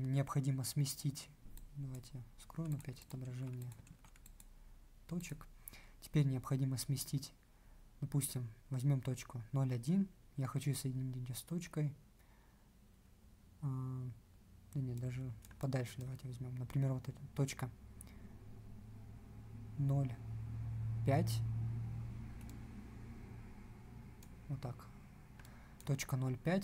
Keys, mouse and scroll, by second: 3.3 ctrl+q.